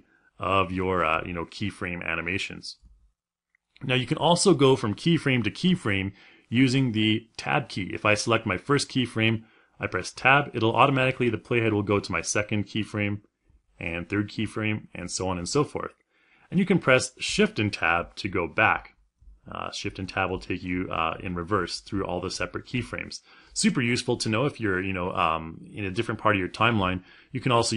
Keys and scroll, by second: 9.8 Tab, 13.6 Tab, 18.0 shift+Tab.